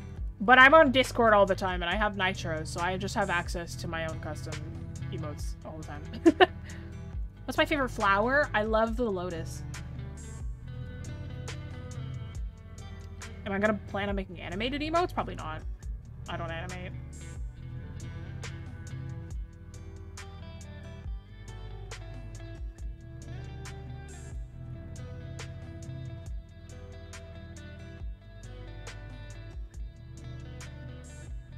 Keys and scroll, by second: 4.5-4.8 scroll down 1, 5.3-5.6 scroll up 1.